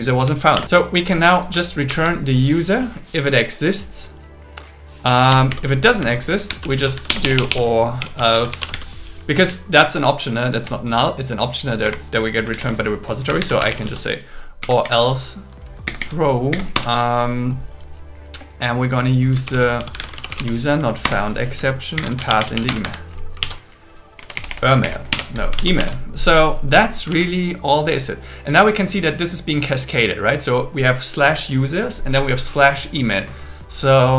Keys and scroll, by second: 0.5 super+7, 1.9 super+Right, 7.1 BackSpace, 8.5 BackSpace, 9.5 Left, 10.4 Left, 11.8 End, 12.6 alt+shift+Left, 14.6 Down, 15.9 Down, 16.8 Return, 19.2-20.6 typing, 21.0 Return, 22.0 shift+8, 22.7 Escape, 23.4 super+s, 24.2 Left, 25.1 BackSpace, 25.8 super+s, 27.1 super+s.